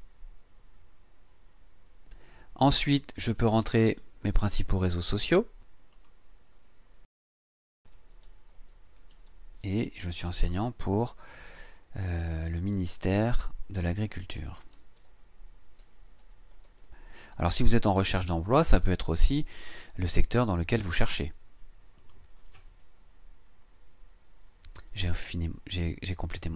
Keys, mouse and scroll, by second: 2.8 click, 5.9 click, 7.2-9.8 typing, 10.3 click, 12.2-18.4 typing, 22.0 click.